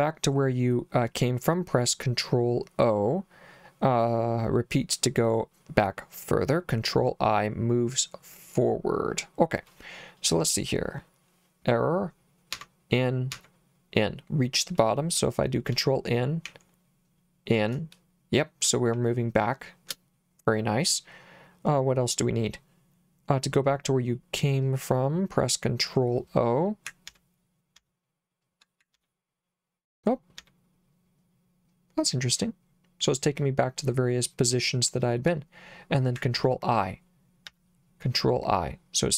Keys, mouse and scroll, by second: 12.5 n, 13.3 n, 15.7 shift+n, 16.5 shift+n, 18.9 shift+n, 27.1 ctrl+o, 27.8 ctrl+o, 29.0 ctrl+o, 30.4 ctrl+o, 36.4 ctrl+i, 37.5 ctrl+i.